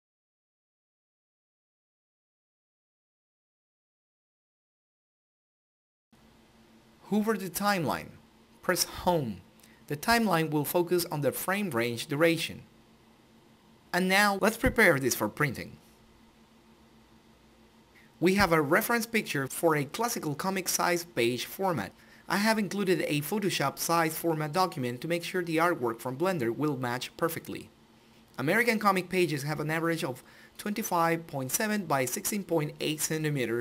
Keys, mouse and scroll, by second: 4.2 click, 8.6 Home, 16.6-20.8 drag, 21.5-24.9 drag, 24.9-25.7 scroll down 1, 26.2 click.